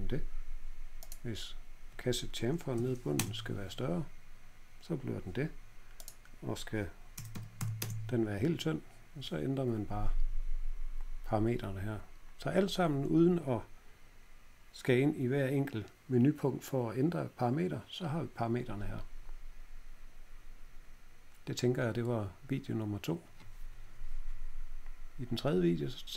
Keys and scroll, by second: 0.2-1.0 typing, 2.4-3.2 typing, 5.1 typing, 6.9-7.7 typing.